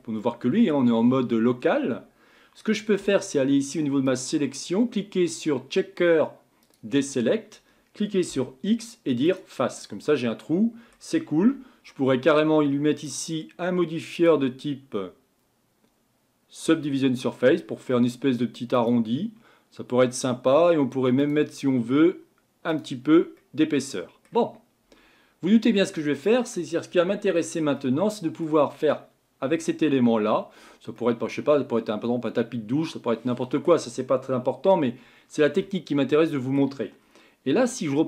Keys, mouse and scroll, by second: 4.0-7.1 drag, 8.3 x, 9.8-11.4 middle drag, 11.4 Tab, 13.0-17.2 drag, 18.7-23.4 drag, 23.4-24.9 middle drag, 24.9 Tab, 25.7 middle click, 26.6-27.0 scroll up 3, 27.2-27.8 scroll down 3, 27.8-30.8 middle drag, 31.0-34.0 middle drag, 35.6-37.0 middle drag, 37.0-38.0 scroll down 2.